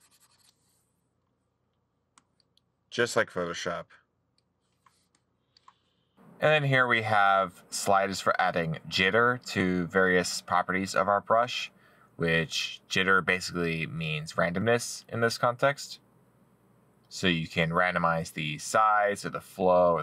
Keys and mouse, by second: 18.2 middle click.